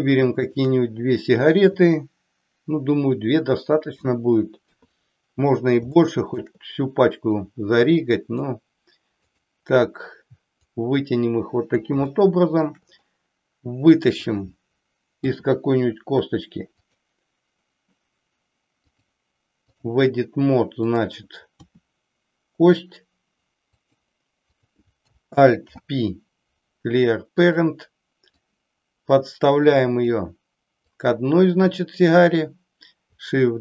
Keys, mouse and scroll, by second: 4.6 KP_3, 6.1-6.5 shift+middle drag, 7.4-8.5 drag, 9.2 click, 10.6-11.8 drag, 12.1-12.8 shift+middle drag, 14.1 click, 15.2 e, 16.8 click, 18.8-19.8 drag, 20.8 click, 21.6 e, 23.8 click, 24.6 click, 25.6 alt+p, 28.3-30.1 drag, 30.9-32.3 drag.